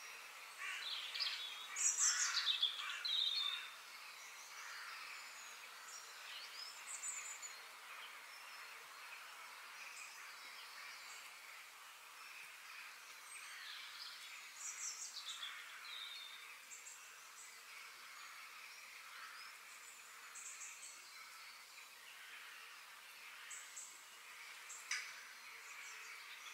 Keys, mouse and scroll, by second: 0.8 middle click, 1.1 x, 1.1 click, 1.7 click, 3.1 f, 6.1 click, 6.6 x, 7.9 f, 10.1 Tab, 10.5 Tab, 10.7 click, 11.0 Tab, 11.3 Tab, 12.0 click, 12.4 shift+click, 13.2 shift+d, 16.6 middle click, 17.4-17.8 scroll down 1, 17.8-18.9 middle drag, 18.9 g, 21.2 middle click, 21.6 click, 21.9-24.1 middle drag, 24.1 click, 24.6 shift+click, 25.3 shift+d.